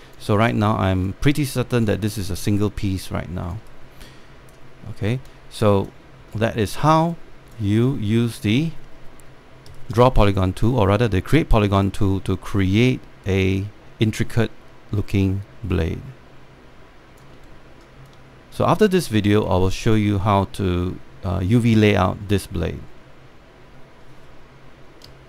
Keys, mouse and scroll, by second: 0.4 alt+click, 1.0 scroll down 1, 1.2 click, 1.6 scroll down 1, 2.1-2.5 scroll up 1, 4.4 right click, 5.8 scroll down 1, 5.8 alt+click, 6.7 scroll up 1, 7.1 alt+middle click, 7.6 alt+click, 8.4 scroll up 1, 8.6 alt+middle click, 9.1 alt+scroll down 1, 11.2-13.4 shift+right drag, 13.8-17.9 alt+drag, 18.1 alt+middle click, 18.7 alt+click, 19.8-21.9 alt+drag.